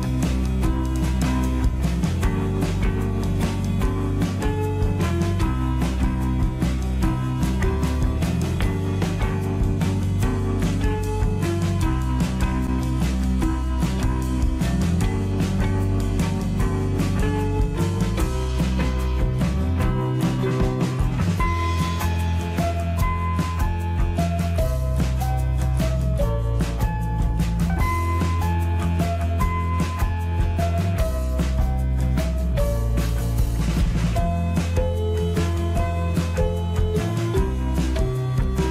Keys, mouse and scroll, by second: 2.6 click, 6.0 x, 7.7 click, 11.2 x, 12.4 click, 14.1-22.5 middle drag, 28.8-34.7 middle drag, 34.7 scroll up 1, 38.3 s.